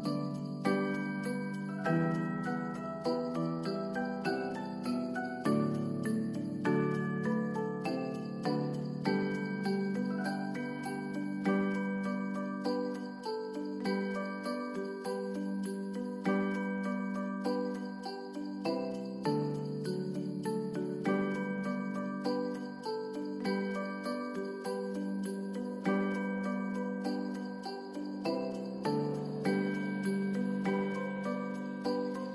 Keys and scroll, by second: 3.1 space, 5.2 F9, 11.7 space, 15.7 space, 21.1 ctrl+s, 23.0 space, 31.7 ctrl+s.